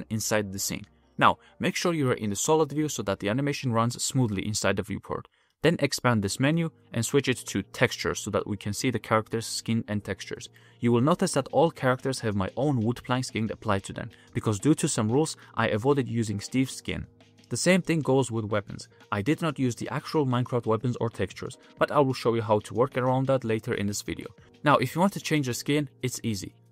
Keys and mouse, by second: 0.8-1.4 middle drag, 1.5 shift+middle click, 2.0 middle click, 3.2 shift+middle click, 3.6 ctrl+Tab, 3.8 a, 4.0 a, 5.3-6.2 drag, 10.9-13.7 middle drag, 19.6 f, 20.6-20.9 middle drag, 21.9 ctrl+z, 22.9 ctrl+z, 23.7 g, 24.4 g, 24.6 ctrl+Tab, 24.9 ctrl+Tab.